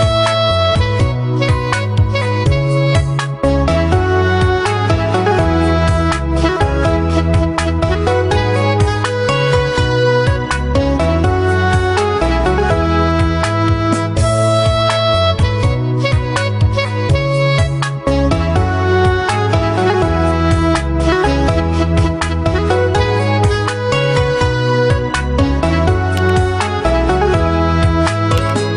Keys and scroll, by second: 11.5 ctrl+d, 22.0 Delete.